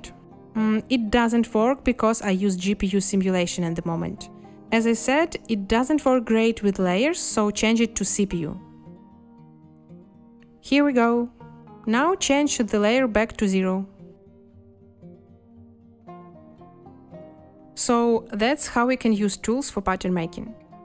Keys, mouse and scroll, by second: 3.3 space, 8.6 space, 12.8 space, 16.2 0, 16.5 Return, 17.6 2.